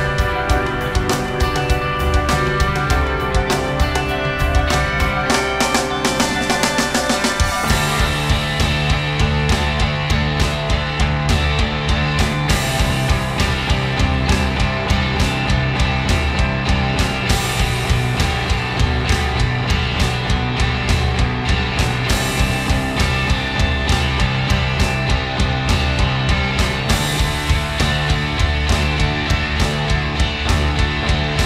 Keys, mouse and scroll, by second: 0.8 Tab, 1.8 Tab, 1.9 s, 3.6 Tab, 3.8 g, 8.2 Tab, 8.5 a, 8.8 a, 10.3 a, 10.7-11.9 drag, 11.9 s, 15.7 s, 16.1-18.6 drag, 17.0 Tab, 18.7-20.4 drag, 19.3 s, 21.2 s, 22.7-23.8 drag, 22.8 s, 23.8 Tab, 23.9 g, 24.2 Tab, 24.2 s, 25.1 ctrl+., 25.4 s, 26.8 s, 27.8 ctrl+z, 28.1 ctrl+z, 28.4 Tab.